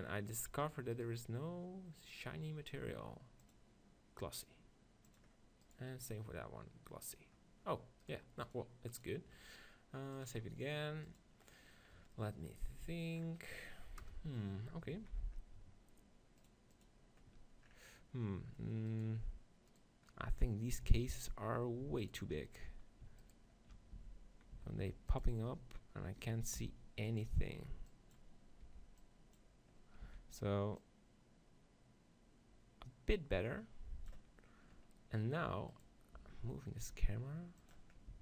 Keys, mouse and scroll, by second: 0.6-5.2 right drag, 2.3-5.4 drag, 5.7-7.5 right drag, 8.1-10.9 right drag, 10.4-12.0 drag, 11.9 middle click, 14.0 KP_0, 15.0 z, 16.4-18.6 drag, 18.6 middle click, 19.0-20.9 right drag, 20.9-22.1 middle drag, 20.9 z, 22.1-23.1 right drag, 24.0 z, 24.6 z, 26.7 g, 26.9 right click, 27.6 b, 28.6 b, 30.2 z, 30.8-32.8 drag, 34.8-35.8 middle drag, 35.8 right click, 36.2 g, 37.7 click, 38.1 z.